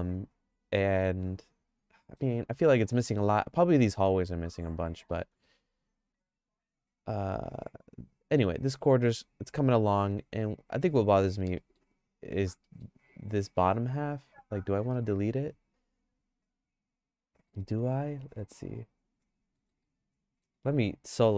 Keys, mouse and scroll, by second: 5.1 middle click, 5.4-10.9 shift+middle drag, 11.6 middle click, 12.6 middle click, 13.1 click, 13.6 Tab, 14.9-17.5 shift+middle drag, 18.2 2, 18.6 3, 19.0 click, 19.6 middle click, 19.9 shift+middle click, 20.6 Tab.